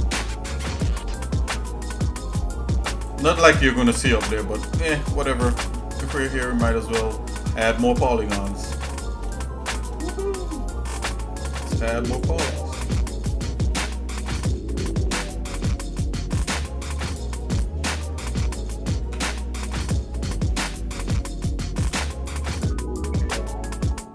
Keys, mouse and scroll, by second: 3.3-4.5 shift+middle drag, 4.8 scroll up 1, 5.3 shift+middle click, 5.9 scroll down 2, 6.4 shift+middle click, 7.0 scroll up 1, 7.2 scroll down 1, 7.5 scroll up 1, 7.8 ctrl+Tab, 9.4 shift+middle click, 10.0 scroll down 1, 10.4 middle click, 10.8-11.1 scroll up 2, 11.4 scroll up 1, 12.1 click, 12.9 click, 13.4 click, 13.9 shift+middle click, 14.8 shift+middle click, 15.3-16.4 shift+middle drag, 17.4 shift+click, 19.1 KP_Divide, 20.2-20.8 scroll up 2, 21.1 shift+middle click, 22.2 click, 22.7-23.7 shift+middle drag.